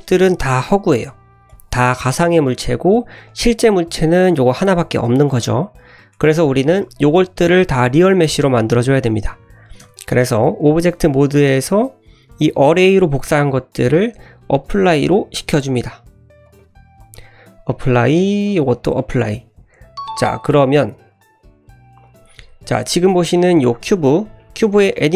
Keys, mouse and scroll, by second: 0.2 middle click, 1.0 middle click, 1.5 click, 1.8 middle click, 2.9-3.2 scroll up 1, 3.2 click, 3.8 middle click, 4.6 drag, 5.1 middle click, 5.7-6.1 scroll down 2, 6.1 middle click, 7.5 middle click, 8.3-8.8 scroll up 1, 8.8-9.7 scroll down 2, 10.0 Tab, 10.0 scroll down 1, 10.2 shift+middle drag, 10.9 click, 11.3 click, 12.4 click, 13.8-15.2 drag, 16.4-18.0 drag, 18.4-21.2 drag, 21.4 l, 22.0 click, 23.3 click, 24.4 shift+middle drag.